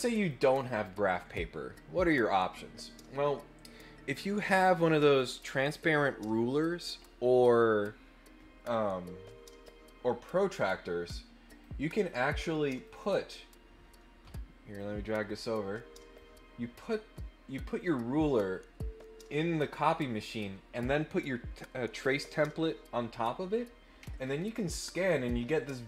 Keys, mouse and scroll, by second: 0.2 click, 11.4 click, 12.8 click, 14.8-16.1 drag, 24.4-24.7 ctrl+scroll up 4.